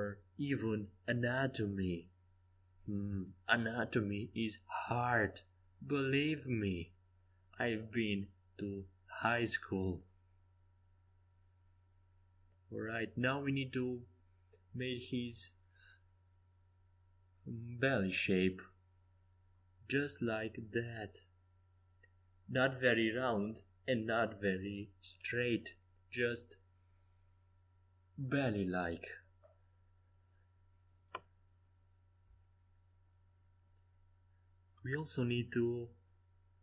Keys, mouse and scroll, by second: 1.6 b, 3.1 g, 5.9 a, 7.0 b, 8.8 c, 10.5 g, 12.9 Escape, 13.6 a, 16.9 c, 18.6 g, 21.9 a, 22.7 c, 25.3 g, 29.2 Escape, 30.3 middle click, 31.8 c, 34.8 a, 35.8 c.